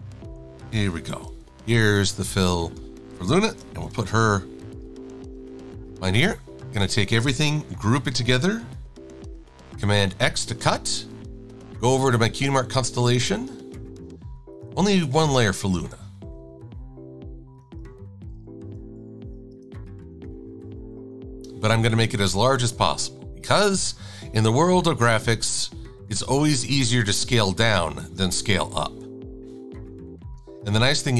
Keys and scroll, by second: 7.9 super+g, 9.9 super+x, 19.0 n, 20.8 super+v, 22.3 e.